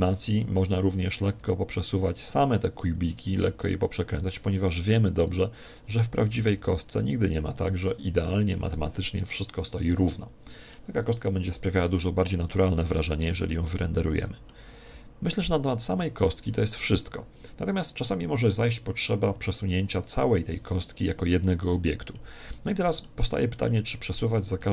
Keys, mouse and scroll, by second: 0.1 right click, 2.9 click, 3.3 r, 4.8-6.7 right drag, 6.7 r, 7.5 click, 9.3 middle click, 9.3 click, 11.1 Tab, 11.5 Tab, 24.3 middle click, 24.3-24.7 right drag.